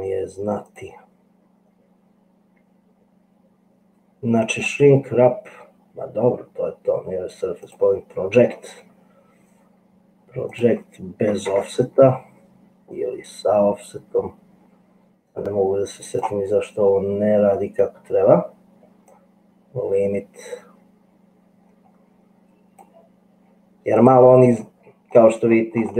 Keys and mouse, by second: 4.6-8.0 drag, 10.8-16.3 drag, 19.4-23.0 drag, 24.0 click, 25.5 middle click.